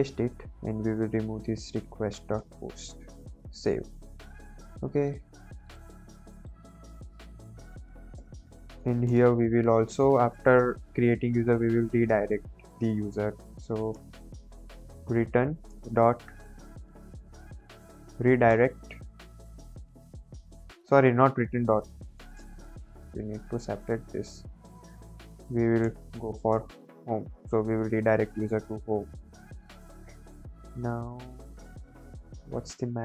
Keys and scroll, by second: 2.3 BackSpace, 2.6 ctrl+s, 8.1 BackSpace, 9.0 Return, 13.6-15.6 typing, 16.6-19.9 typing, 19.9 Left, 20.6 shift+Left, 21.1 Left, 21.2 Left, 21.2 Left, 21.5 Left, 22.1 BackSpace, 22.3 space, 23.5 End, 24.0 Left, 25.8-27.4 typing.